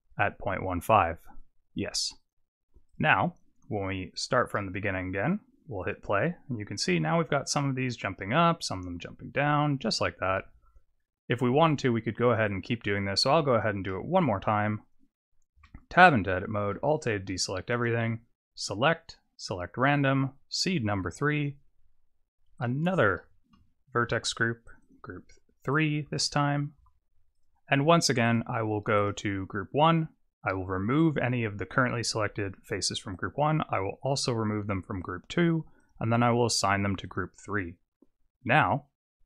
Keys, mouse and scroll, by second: 0.8 click, 2.2 click, 2.8 click, 4.1 click, 4.5 middle click, 5.8 click, 12.6 click, 13.0 click, 13.2 click, 13.9 middle click, 14.7 click, 15.6 Tab, 16.7 alt+a, 17.7 click, 21.3 click, 22.5 click, 24.7 click, 24.8 click, 28.2 click, 29.0 click, 31.0 click, 33.2 click, 35.0 click, 35.8 click, 37.0 click.